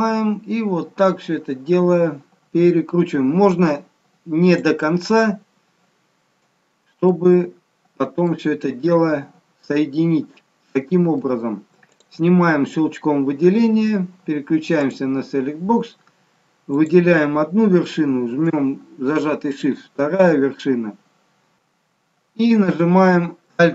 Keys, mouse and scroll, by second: 21.5 click, 21.5 n.